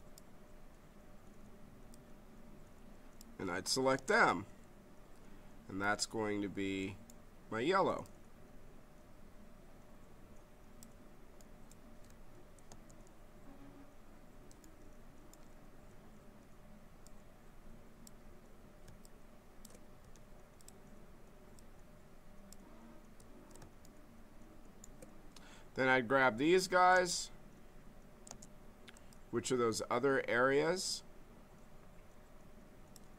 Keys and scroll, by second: 3.9 space, 12.7 space, 20.0 z, 26.9 space, 28.2 space.